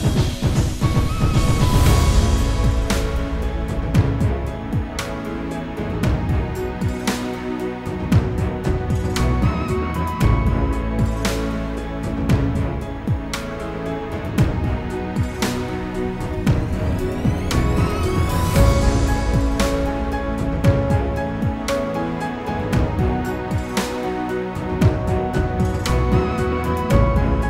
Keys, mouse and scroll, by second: 0.2-0.7 scroll down 3, 0.9 click, 1.1 click, 1.3 scroll down 1, 1.5 click, 1.6 shift+click, 1.8 click, 2.2-2.9 scroll down 2, 2.9 click, 3.3 click, 3.6 typing, 3.7 click, 4.2 scroll down 1, 4.7-5.0 scroll down 2, 5.2 click, 5.4 scroll up 1, 5.7 click, 5.9 scroll down 1, 6.4 click, 6.5 double click, 6.5 scroll down 1, 6.9 scroll up 1, 7.1 click, 7.8 click, 8.1 click, 8.4 click, 8.8 click, 9.0 scroll up 1, 9.1 scroll down 2, 9.2 click, 9.4 scroll up 1, 9.6 F4, 9.8 click, 9.9 click, 10.2 click, 10.3 ctrl+click, 10.6 click, 10.9 double click, 10.9 click, 11.1 click, 11.2 click, 11.4 click, 11.6 ctrl+z, 12.0 ctrl+click, 12.1 scroll up 1, 12.2-12.7 scroll down 2, 12.4 F4, 12.5 click, 12.7 click, 13.2 click, 13.3 click, 13.8 ctrl+o, 16.2 click, 17.1 click, 22.4 F4, 24.2 click, 26.1 F4, 26.8 F9.